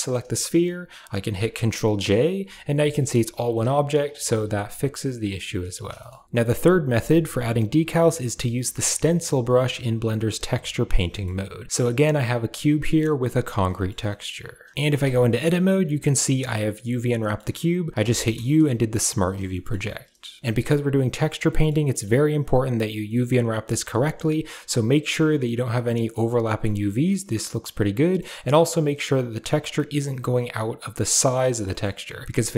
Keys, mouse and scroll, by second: 0.9 ctrl+j, 1.7 middle drag, 2.3 Tab, 2.6 a, 5.1-5.6 middle drag, 10.9-12.6 shift+middle drag, 13.5 shift+middle click, 13.9 middle click, 14.5 shift+middle click, 14.8 Tab, 15.5 a, 17.0 middle click, 19.4 shift+middle click, 20.1 shift+middle click, 21.2 middle click, 21.8 middle click, 22.9 middle click, 23.3 middle click, 26.0 middle click, 27.6 middle click, 31.6 middle drag, 32.2 s.